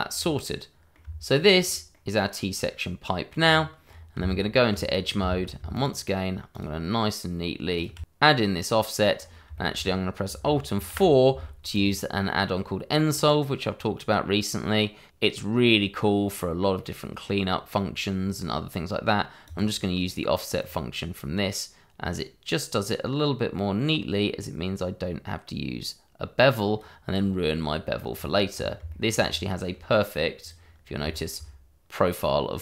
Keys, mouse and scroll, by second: 0.1-0.4 scroll down 1, 0.4 middle click, 1.0 Tab, 1.6 scroll down 1, 1.9 middle click, 3.4-4.2 scroll up 1, 4.2 Tab, 4.9 scroll up 1, 5.7 alt+shift+click, 5.8 click, 7.2 click, 7.7 click, 8.0 scroll down 1, 8.2 middle click, 10.1 scroll up 1, 10.3 shift+middle click, 11.0 alt+4, 11.7 click, 19.4 click, 26.2 click, 27.1-27.6 scroll down 1, 28.1-28.5 scroll up 1, 28.9 shift+middle click, 29.2-30.4 scroll up 1, 30.4 click, 31.1 shift+middle click.